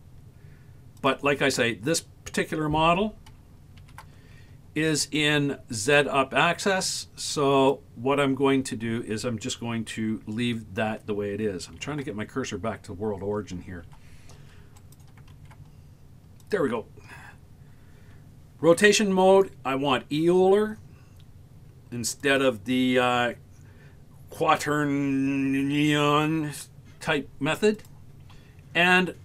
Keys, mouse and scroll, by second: 1.1 click, 3.8 shift+s, 11.8 shift+s, 15.4 shift+s.